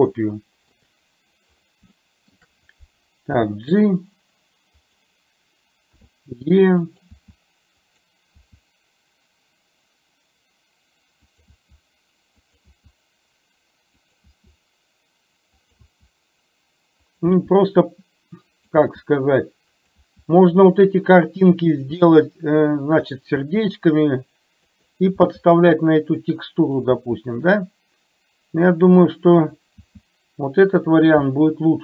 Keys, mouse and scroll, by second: 0.2 shift+middle click, 2.1 shift+middle click, 7.2 e, 11.5 e, 12.7 e, 15.9 e, 17.4 e, 20.1 e, 22.0 e, 23.5 e, 25.2 e, 27.1 e.